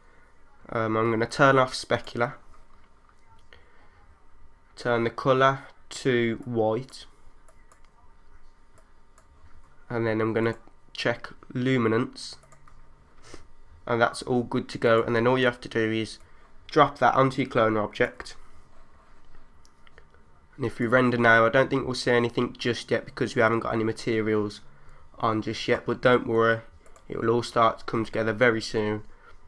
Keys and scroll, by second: 28.7 3.